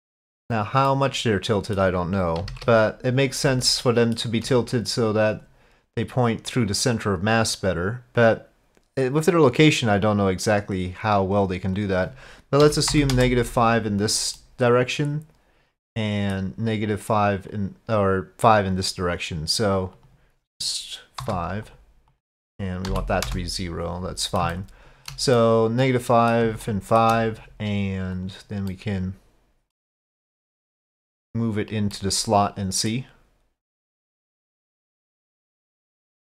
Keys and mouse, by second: 0.9 middle click, 2.4 KP_5, 2.5 KP_1, 3.5-4.3 shift+middle drag, 5.4 click, 6.7-14.0 drag, 14.4-17.6 middle drag, 17.6-18.8 drag, 20.1-21.7 drag, 22.2-24.1 drag, 24.5-25.2 shift+middle drag, 25.4-26.4 middle drag, 26.6-27.1 shift+middle drag, 28.2 click, 28.7-30.6 middle drag, 30.6-31.8 drag, 32.0-33.0 middle drag, 33.7 click, 35.1-36.2 drag.